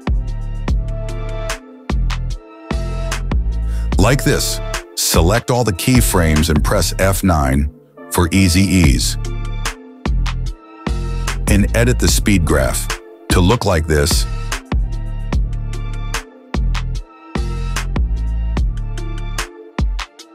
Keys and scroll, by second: 8.8 F9, 14.2 space, 15.7 space.